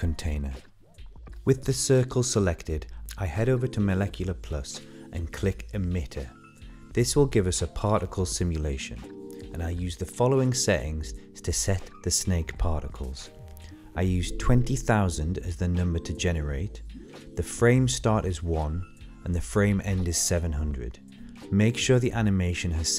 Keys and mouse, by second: 1.2-1.6 shift+middle drag, 1.9-2.5 middle drag, 2.6-3.0 shift+middle drag, 3.8 middle click, 5.5 space, 7.5 click, 11.6 click, 14.0-18.5 drag, 17.6 KP_0, 20.4-22.9 drag.